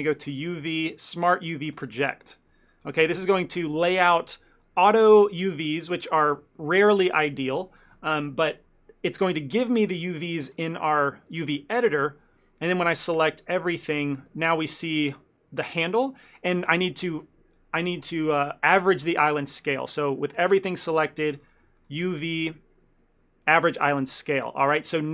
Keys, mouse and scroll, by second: 0.3 click, 10.8 shift+middle click, 12.1 n, 13.4 a, 14.4 shift+middle click, 16.8 ctrl+middle click, 20.7 a, 21.0 a, 21.5 click, 22.1 click, 25.0 ctrl+middle click.